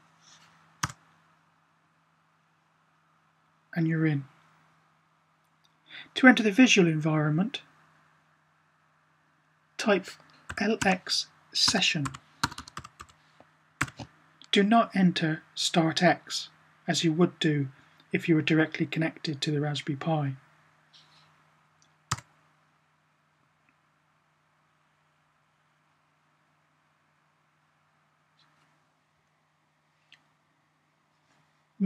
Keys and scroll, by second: 10.2-13.7 typing.